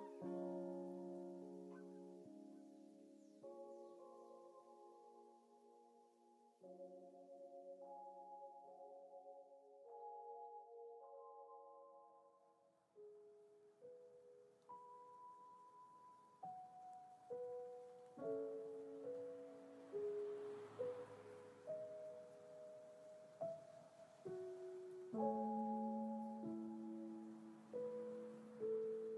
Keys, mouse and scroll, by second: 2.2 click, 4.3-4.9 scroll down 2, 5.2 click, 6.6 g, 13.6 click, 22.9 click, 24.5-26.6 drag, 28.3 click.